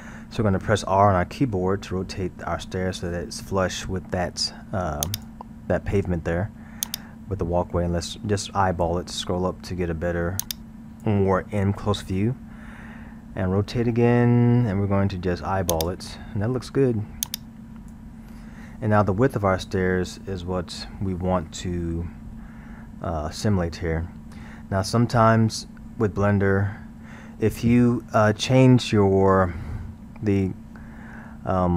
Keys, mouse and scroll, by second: 1.9 r, 6.9 click, 9.1 scroll, 10.4 click, 11.7-13.1 scroll, 13.4 r, 17.3 click, 24.5 scroll.